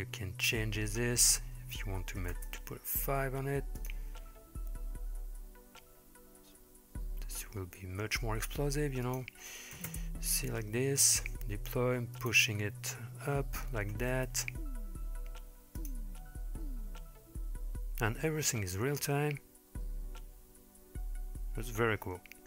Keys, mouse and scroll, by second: 1.3-2.4 drag, 3.8 click, 9.1 click, 12.2-14.2 drag, 15.8 click.